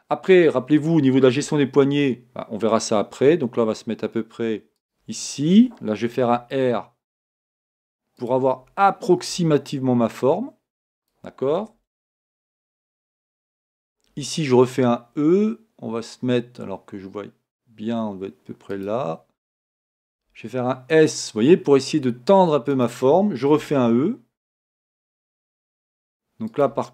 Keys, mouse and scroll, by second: 12.1-20.3 middle drag, 13.8 e, 20.3 s.